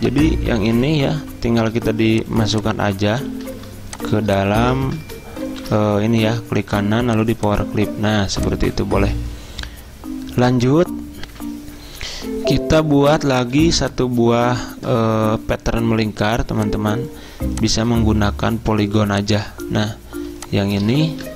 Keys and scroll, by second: 0.7 ctrl+z, 3.4 ctrl+z, 5.6 ctrl+g, 11.3 F10, 11.5 F10, 12.6 z, 13.5 z, 21.2 ctrl+z.